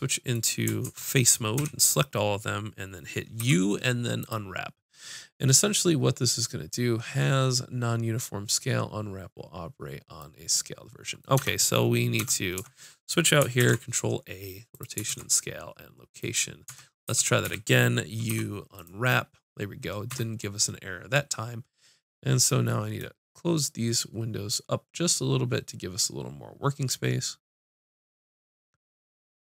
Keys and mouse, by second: 0.8 ctrl+Tab, 1.6 a, 3.4 u, 10.4 middle click, 12.6 Tab, 13.6 ctrl+a, 15.1 ctrl+a, 16.7 Tab, 17.1 a, 17.4 a, 18.3 u, 20.1 Tab.